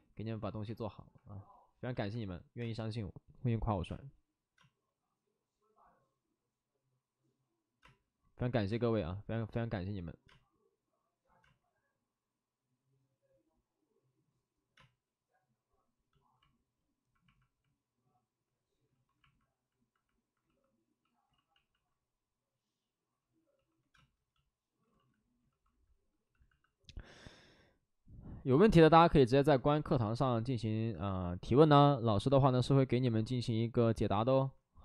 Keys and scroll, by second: 2.5 alt+s, 2.5 space, 3.8 space, 4.5 space, 7.7 space, 8.6 space, 9.0 ctrl+z, 10.2 ctrl+z, 10.2 space, 11.4 space, 16.1 space, 20.3 ctrl+d, 20.5 ctrl+d, 20.8 ctrl+d, 21.3 ctrl+z, 21.4 ctrl+z, 23.1 ctrl+d, 23.1 ctrl+z, 23.9 space, 24.9 ctrl+z, 25.4 ctrl+d, 26.2 b, 29.7 s, 30.9 c.